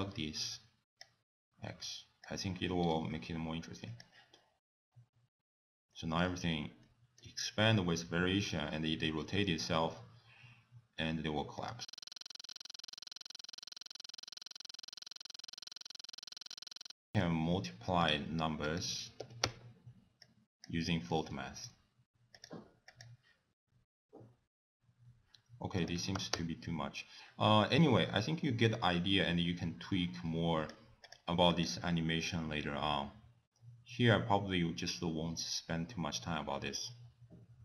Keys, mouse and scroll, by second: 2.3 click, 2.9 scroll down 3, 3.9 click, 5.9 middle click, 6.2-6.7 scroll up 4, 6.8 middle click, 7.4 scroll down 1, 11.6 click, 11.9 click, 12.1 click, 14.1 click, 14.4 click, 14.6 click, 14.8 |, 14.9 click, 15.0 click, 15.3 click, 15.7 click, 16.3 shift+d, 18.0 click, 18.7 click, 20.2 click, 20.9 middle click, 21.3 scroll down 2, 22.3 click, 22.9 click, 25.9 click, 30.6 click, 31.0 click, 31.7 click.